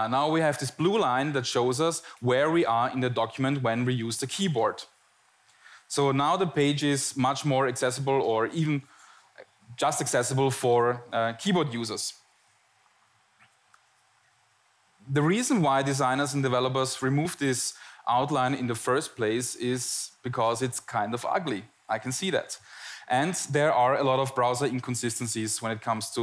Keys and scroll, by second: 0.3 Tab, 1.2 Tab, 1.7 Tab, 2.3 Tab, 3.1 Tab, 6.1 Tab, 6.9 Tab, 7.5 Tab, 8.3 Tab, 9.2 Tab, 9.7 Tab, 10.2 Tab.